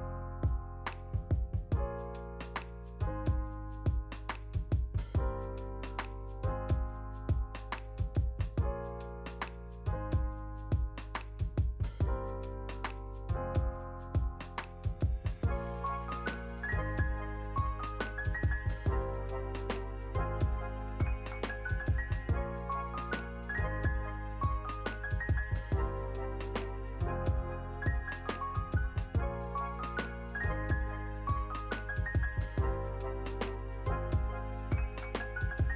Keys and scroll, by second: 19.2 ctrl+s, 30.7 ctrl+s.